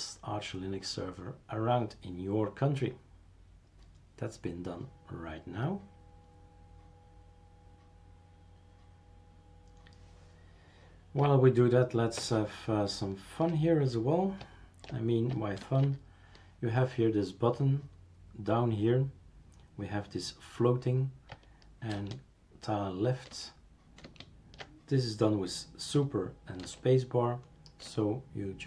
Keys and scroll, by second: 12.2 super+Return, 15.6 super+space, 21.9 super+space, 23.4 super+space, 24.0 super+space, 26.6 super+space, 27.8 super+space.